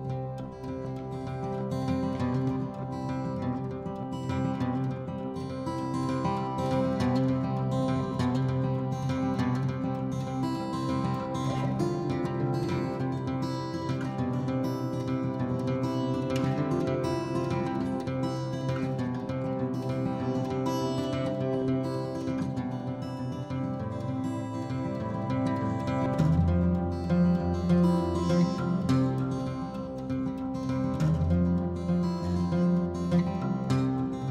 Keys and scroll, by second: 1.0-1.9 typing, 2.0 Escape, 3.7 ctrl+z, 4.3 ctrl+z, 9.4-9.8 typing, 10.0 Return, 12.0 l, 14.0 Escape, 14.1-15.1 typing, 15.2 Escape, 22.1-23.8 typing, 26.5 ctrl+g, 26.9 m, 30.5 p, 31.4 Escape, 31.9 m, 33.5 Escape.